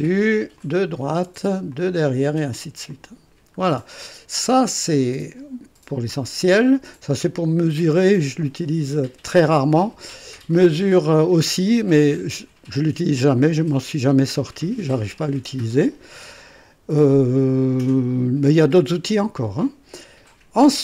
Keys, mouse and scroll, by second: 0.6 click, 1.7 click, 2.9 click, 3.7-4.0 scroll down 2, 4.4-5.5 drag.